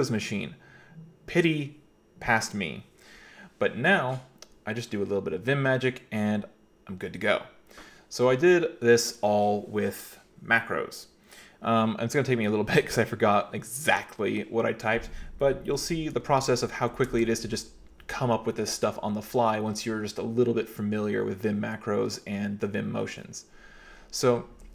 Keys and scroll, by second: 15.9 k, 16.2 k, 16.9 Escape, 17.1 Escape, 17.3 Escape, 17.5 k.